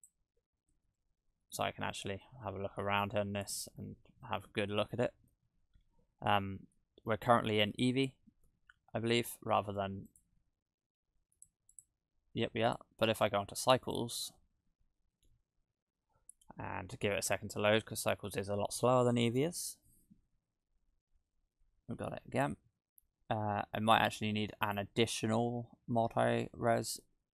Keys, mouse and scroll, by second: 0.8 `, 11.3 click, 11.7 click, 12.7 click, 24.7 click, 27.0 shift+`.